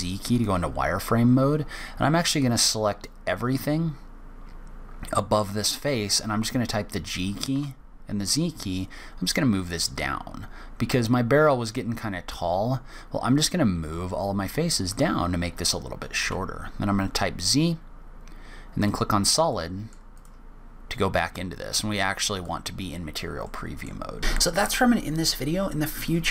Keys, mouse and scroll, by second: 2.1 click, 5.7 g, 16.0 z, 19.3 middle click, 19.9 click, 22.1 click, 23.2 middle click, 23.9 scroll down 1, 24.2-26.3 scroll up 1.